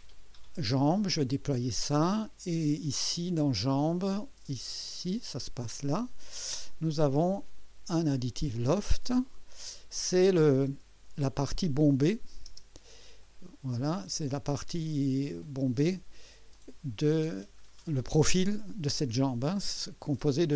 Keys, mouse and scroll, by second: 0.1 click, 1.4 scroll down 2, 4.8 click, 6.2 click, 8.0 click, 9.2 click, 9.7 scroll down 2, 10.7 space, 11.7 space, 12.4 space, 13.2 click, 15.4 click, 15.8 space, 16.5 click, 18.1 click.